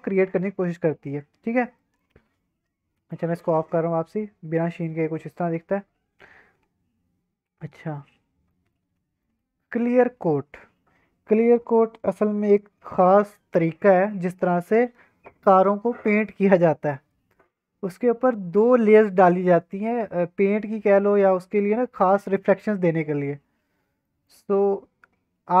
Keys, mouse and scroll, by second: 1.7 scroll down 1, 1.8 middle click, 3.1 click, 3.8 click, 7.6-8.5 scroll down 3, 8.5 middle drag, 8.7-9.4 scroll up 2, 9.2 middle click, 23.9-24.6 scroll down 2, 24.0 middle drag, 24.6-25.6 scroll up 2.